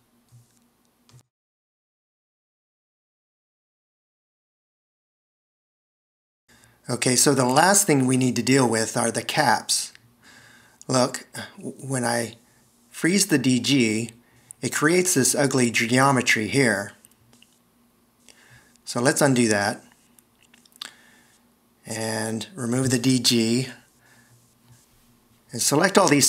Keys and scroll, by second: 4.1 Escape, 25.0 d.